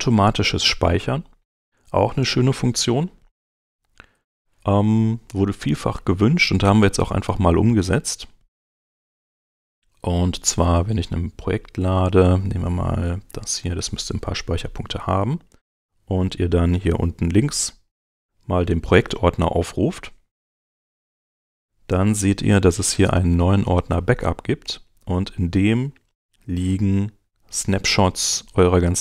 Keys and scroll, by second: 3.3 super+Tab, 24.6 Right.